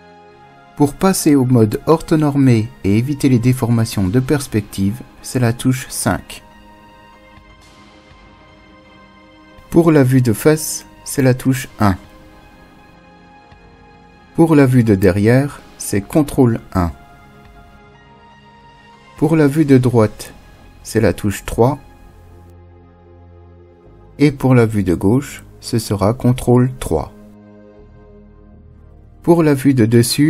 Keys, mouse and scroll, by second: 3.8 KP_5, 11.7 KP_1, 15.7 ctrl+KP_1, 20.7 KP_3, 25.7 ctrl+KP_3, 29.9 KP_7.